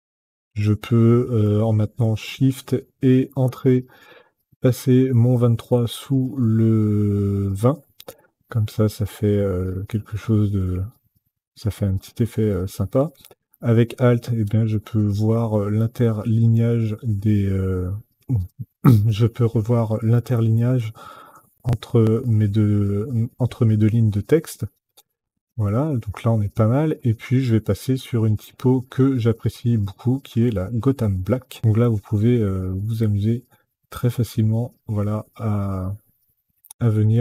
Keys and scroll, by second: 3.1 shift+Return, 13.6 alt+Up, 14.3 alt+Up, 14.9 alt+Down, 15.5 alt+Down, 15.9 alt+Up, 16.6 alt+Down, 19.2 alt+Up, 19.5 alt+Down, 20.1 alt+Up, 20.7 alt+Down, 21.1 alt+Up, 21.4 alt+Down, 22.2 alt+Up, 23.1 alt+Down, 23.4 alt+Up, 23.7 alt+Down.